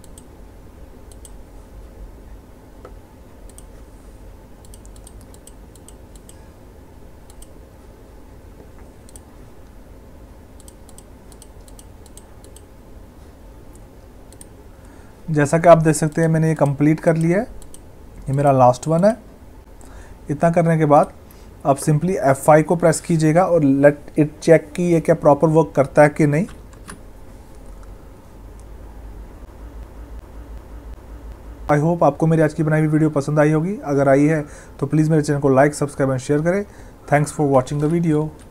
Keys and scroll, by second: 26.6 F5, 37.7 Escape.